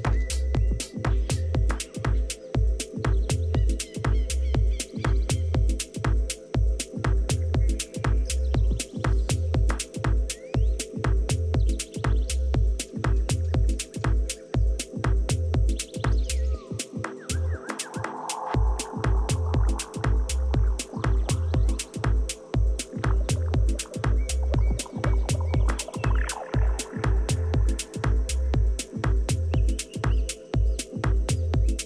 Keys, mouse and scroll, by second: 0.0-1.7 drag, 9.9 a, 12.8-14.6 right drag, 13.6-15.5 drag, 18.1 a, 18.8-21.9 right drag, 21.4-23.4 drag, 24.6 a, 25.3-27.9 right drag, 27.8 click, 28.5-29.6 drag, 30.4-31.6 middle drag, 30.8 a, 31.6-31.8 right drag.